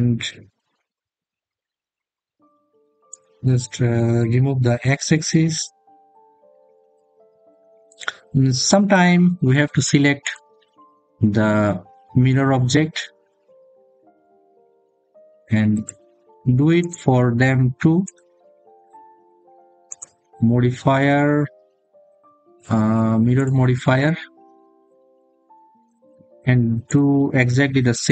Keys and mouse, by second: 5.4-6.8 drag, 10.2 click, 15.6 click, 16.6 click, 17.9 click, 19.8-25.2 drag.